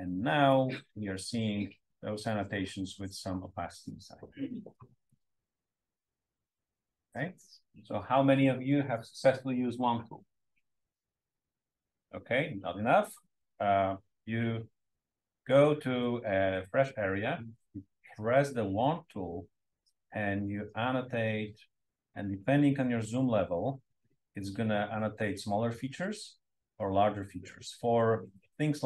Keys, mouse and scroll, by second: 1.2-2.2 drag, 5.0-5.4 scroll up 2, 5.8 scroll up 1, 6.4 scroll up 2, 12.6-14.8 scroll up 3, 14.8 scroll down 2, 14.9-15.4 drag, 15.9-16.4 drag, 18.7 click, 20.1-28.8 drag.